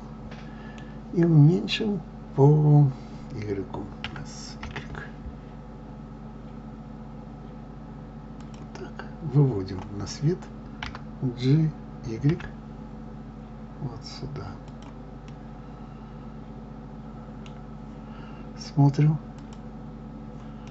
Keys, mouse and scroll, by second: 4.0 s, 15.2-19.2 middle drag, 19.2-20.7 drag.